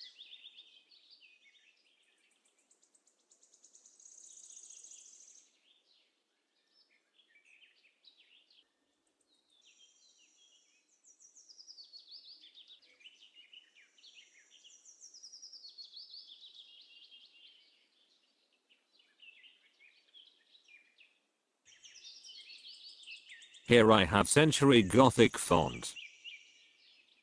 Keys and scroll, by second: 7.2 n, 8.9 n, 17.2 KP_0, 22.7 c, 22.8 e.